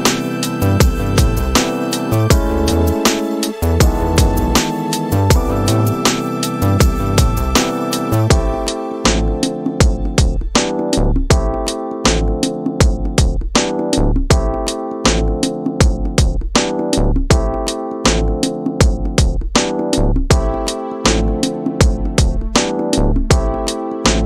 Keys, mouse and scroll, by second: 0.3 middle click, 1.6 click, 3.6 g, 5.7-6.2 scroll down 5, 6.2 middle click, 7.2-24.2 drag.